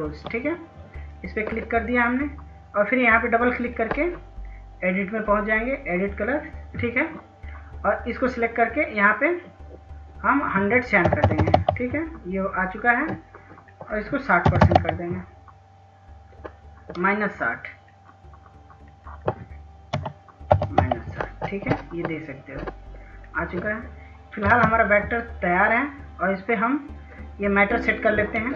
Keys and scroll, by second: 10.1-10.9 typing, 13.3-14.4 typing, 19.1-19.9 typing, 23.7 ctrl+space, 27.6 F2.